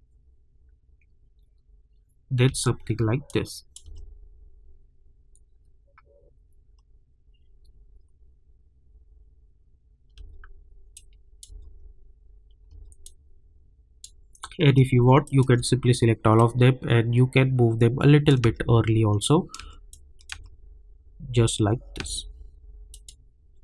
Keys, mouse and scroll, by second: 2.4 space, 3.3 click, 3.8 space, 10.1 space, 10.9 click, 11.4 space, 13.0-15.2 drag, 16.6 click, 18.4 space, 19.9 click, 20.3 space, 22.9 click.